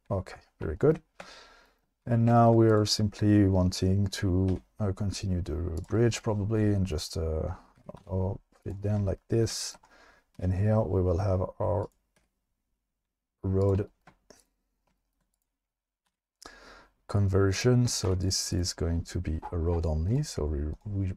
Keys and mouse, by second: 2.0 1, 4.5 e, 5.8 click, 7.8 g, 8.0 z, 10.4 e, 11.8 click, 12.2 e, 13.6 click, 16.1 v, 18.1 2, 18.6 click, 20.1 click, 20.7 click.